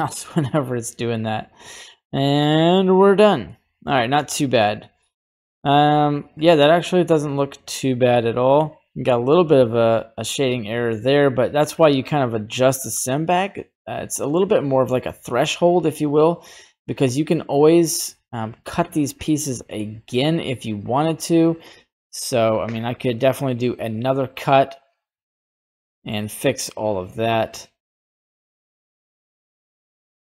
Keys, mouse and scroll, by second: 3.5 middle click, 5.0-6.4 drag, 6.6-8.6 middle drag, 9.7-11.8 drag, 13.1-14.9 middle drag, 15.4-17.3 middle drag, 18.9 click, 19.4 middle click, 20.1 right click, 21.8 middle click, 22.8 click, 23.4 middle click, 24.6 click, 25.3 click, 25.9 middle click, 26.9-27.9 drag, 28.6-30.2 drag.